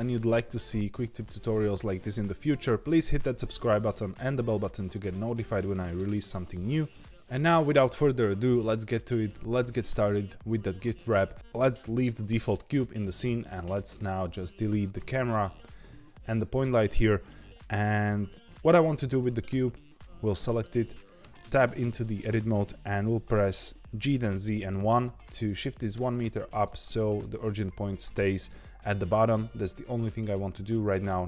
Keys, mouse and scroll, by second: 13.0 click, 13.4 click, 14.1 click, 14.5 x, 15.3 click, 15.8 x, 19.8 click, 21.2 Tab, 23.9 g, 26.9-31.1 middle drag, 31.1 Tab.